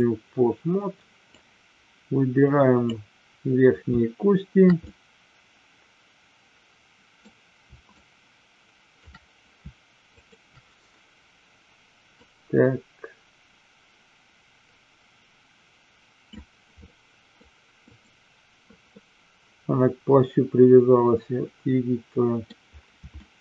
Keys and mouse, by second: 1.3-2.9 drag, 4.8-7.1 middle drag, 7.9-9.1 shift+drag, 10.1-11.1 shift+drag, 12.2-16.4 drag, 16.8 middle click, 17.8 click, 18.9-22.4 middle drag, 23.2-23.4 shift+middle drag.